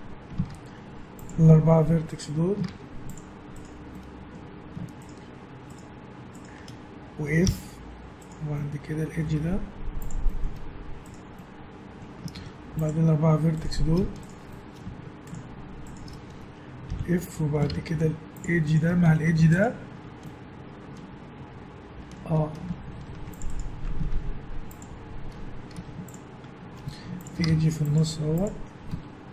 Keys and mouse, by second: 0.5 ctrl+Tab, 2.1 click, 2.7 ctrl+Tab, 3.9 click, 4.5-5.7 middle drag, 7.5 f, 8.7-9.9 middle drag, 9.4 ctrl+Tab, 12.3 ctrl+Tab, 12.8 click, 14.5-16.9 drag, 16.9 f, 17.7 ctrl+Tab, 23.0 ctrl+r, 24.1 ctrl+Tab, 25.7 a, 26.8 z, 27.6 ctrl+Tab, 28.9 a.